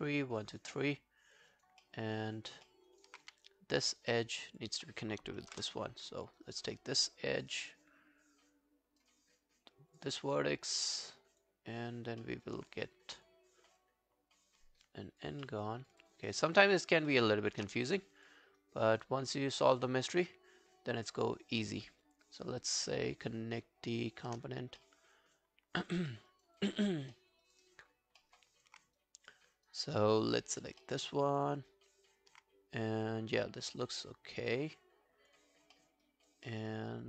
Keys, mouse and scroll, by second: 1.0 alt+click, 1.5 alt+right click, 1.8 alt+middle click, 2.1 alt+right click, 2.7 alt+middle click, 2.9 alt+right click, 3.3 q, 3.5 right click, 5.5 ctrl+BackSpace, 6.4 right click, 7.5 right click, 10.3 scroll down 2, 10.6 alt+click, 10.9 alt+right click, 11.2 alt+click, 12.2 alt+middle click, 12.5 alt+right click, 13.6 scroll down 1, 13.8 alt+click, 15.5 alt+middle click, 15.8 alt+right click, 16.1 alt+click, 16.5 alt+middle click, 17.2 alt+click, 18.2 shift+click, 18.6 shift+right click, 24.8 alt+middle click, 25.2 alt+scroll down 1, 25.4 alt+click, 26.1 alt+middle click, 26.3 alt+right click, 26.6 alt+click, 27.1 alt+middle click, 27.4 alt+right click, 27.6 alt+click, 28.2 alt+middle click, 28.5 alt+click, 29.0 right click, 30.6 alt+scroll down 1, 30.8 alt+middle click, 31.2 alt+right click, 31.4 alt+click, 31.7 alt+right click, 33.1 alt+right click, 33.6 alt+click, 35.8 alt+middle click, 36.1 alt+right click, 36.5 alt+middle click, 36.8 alt+click.